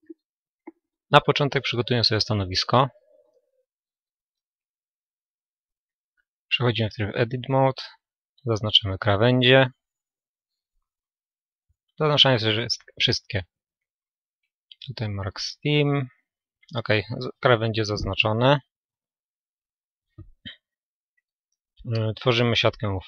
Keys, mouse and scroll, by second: 1.8-3.7 right drag, 4.6-8.0 middle drag, 6.1 Tab, 8.0-9.8 drag, 8.7 a, 9.4 a, 12.4 ctrl+e, 16.0 a, 18.7 a, 20.7 u.